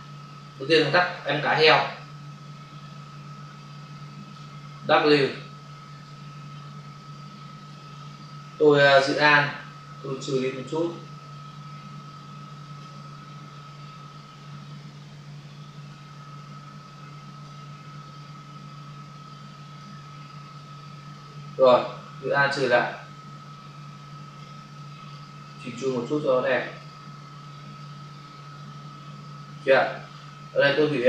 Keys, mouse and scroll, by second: 1.2 space, 5.9 click, 7.9 ctrl+space, 8.8 space, 10.8 alt+click, 14.3 click, 16.3 click, 18.0 click, 20.5 click, 22.2 alt+click, 24.7 alt+click, 26.5 alt+click, 27.4 click, 29.7 space.